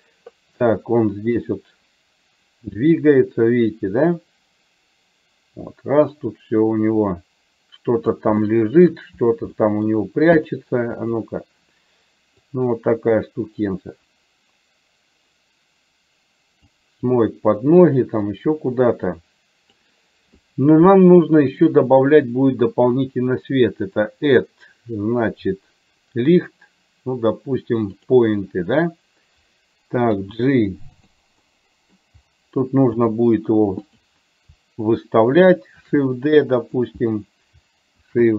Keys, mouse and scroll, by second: 1.5-8.3 drag, 8.7 shift+middle click, 9.7 middle click, 11.2 click, 12.7-16.8 drag, 18.5-20.1 drag, 24.1-28.5 drag, 30.2 g, 31.6 middle click, 33.0 g, 36.1 shift+d, 38.2 shift+d.